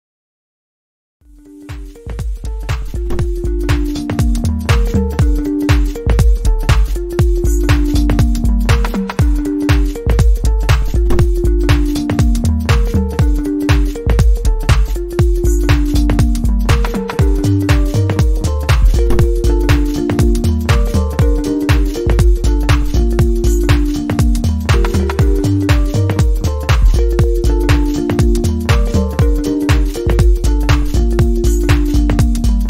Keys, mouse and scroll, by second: 1.0 Return, 3.5 scroll down 2, 4.0-4.7 scroll down 7, 5.0-5.4 alt+scroll down 1, 5.9-6.3 alt+scroll down 1.